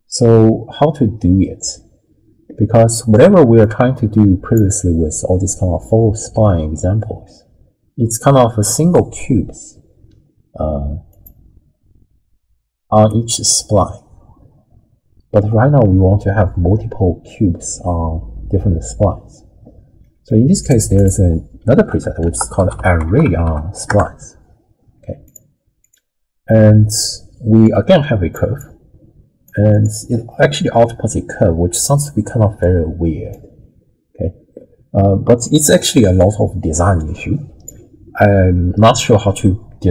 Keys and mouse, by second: 3.6-4.6 drag, 11.1 click, 20.0 click, 20.6 click, 21.0 click, 21.7 ctrl+x, 22.3 ctrl+a, 23.1 r, 25.8 click, 27.6-28.3 drag, 28.6 click, 29.7 alt+shift+click, 32.6 click, 35.4-37.6 drag.